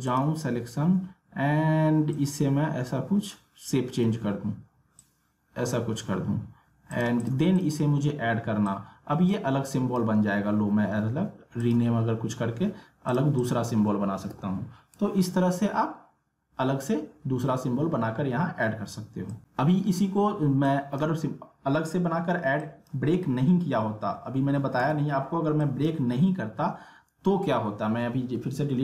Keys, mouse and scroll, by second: 19.3 click, 19.4 ctrl+z, 20.6-24.2 drag, 24.8 ctrl+z, 25.6 click.